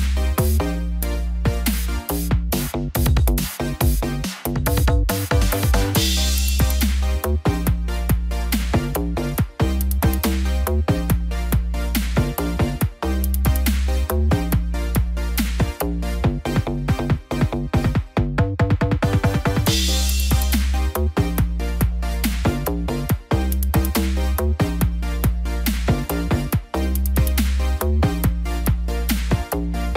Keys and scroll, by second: 2.7 ctrl+d, 3.1 ctrl+-, 3.4 ctrl+0.